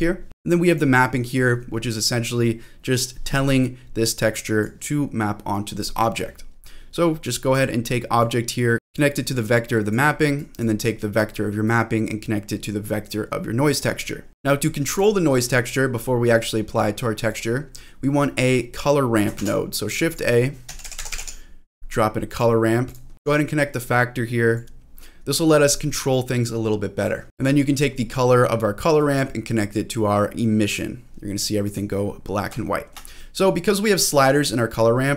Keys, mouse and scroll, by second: 0.7 click, 3.5 scroll down 1, 4.2 click, 7.2 click, 8.2-9.9 drag, 10.4 click, 11.6-13.7 drag, 14.2 scroll down 1, 14.4-15.0 scroll up 5, 14.9 click, 16.0-16.8 scroll down 2, 16.8-17.3 scroll down 1, 17.3 click, 17.6-18.0 scroll up 2, 19.4 shift+a, 23.1 click, 23.3 ctrl+z, 23.7 click, 25.0-25.5 scroll down 1, 27.2 scroll down 1, 27.4 middle click, 29.2-30.8 drag, 31.6 click, 31.9-32.5 scroll up 3, 32.6 shift+middle click, 32.9-33.2 shift+scroll up 1, 33.2-33.9 scroll down 1, 33.9-34.8 scroll up 4, 34.8 middle click.